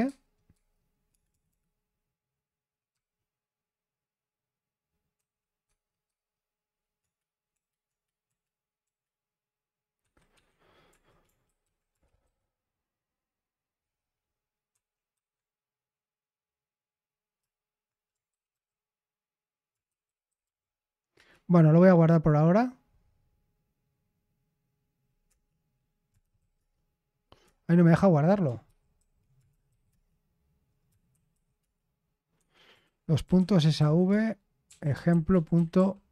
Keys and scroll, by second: 1.0-1.4 typing, 2.6-12.7 typing, 14.6 Escape, 15.1 Escape, 18.2 ctrl+w, 18.5 ctrl+w, 19.7-20.9 typing, 21.1 Return, 25.2 Return, 25.9-26.8 typing, 27.4 Return, 28.6 ctrl+w, 28.9 ctrl+w, 29.4 typing, 29.8 Return, 31.0 typing, 31.5 Return, 32.3 Escape, 32.8-36.1 typing.